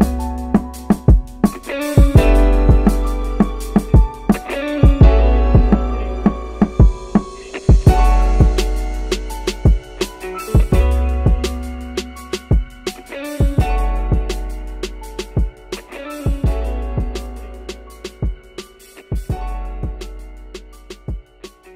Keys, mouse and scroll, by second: 0.1-1.8 drag, 2.3 click, 3.6 shift+click, 4.1 shift+click, 4.8-8.6 drag, 8.9 click, 9.2-11.3 middle drag, 11.5-11.8 scroll up 2, 11.8-13.7 middle drag, 13.9-14.6 scroll down 1, 15.5 click, 16.5 click, 17.6 click.